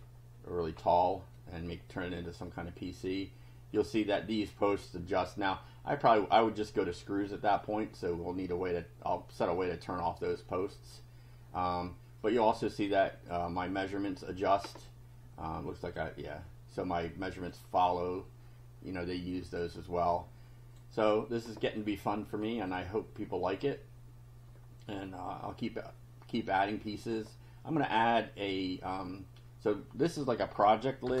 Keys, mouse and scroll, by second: 0.8 scroll down 1, 1.4 click, 2.5-4.0 drag, 10.4-12.5 drag, 12.9 click, 14.9-16.1 drag, 17.0 click, 19.6-20.9 drag, 21.8-22.9 drag, 23.2 scroll down 1, 26.6 click, 31.1 BackSpace.